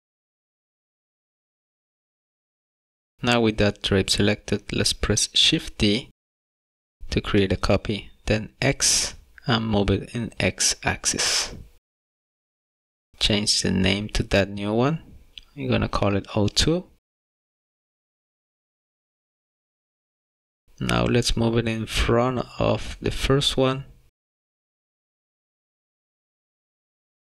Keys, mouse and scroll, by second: 0.1 scroll up 1, 0.2 middle click, 0.8 g, 1.6 middle click, 1.9 scroll down 1, 2.5 click, 4.2 shift+d, 14.7 click, 15.0 click, 19.9 middle click, 21.4 g, 21.9 y, 24.1 g, 25.4 middle click, 26.8 shift+middle click.